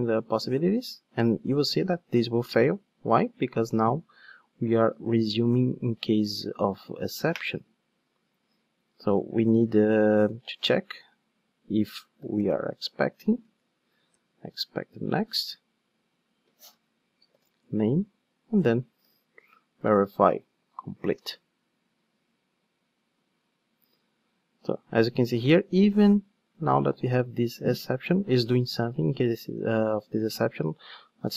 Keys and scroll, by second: 4.9 ctrl+shift+d, 14.1 Return, 20.3 ctrl+shift+d.